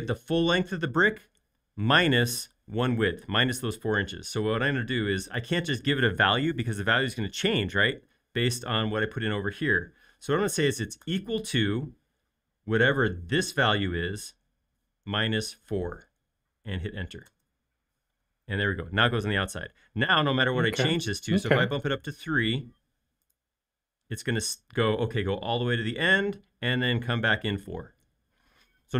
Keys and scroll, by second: 11.3 =, 15.3-16.1 typing, 17.3 Return.